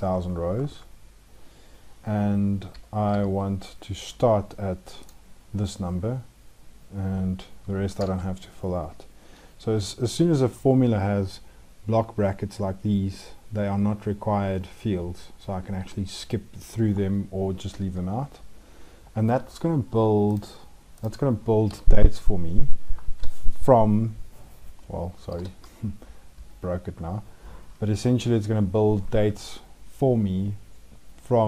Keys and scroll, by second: 22.7 ctrl+shift+Down, 25.3 ctrl+z.